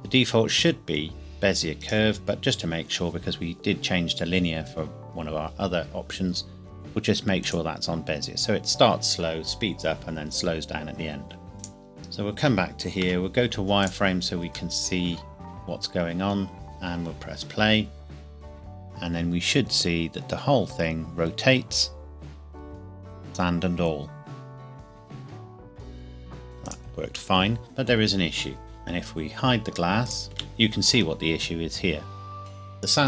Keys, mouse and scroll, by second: 1.8 right click, 7.4 click, 11.6 click, 13.1 z, 13.8 click, 14.8 middle click, 16.6 click, 26.7 click, 30.1 click, 30.4 h.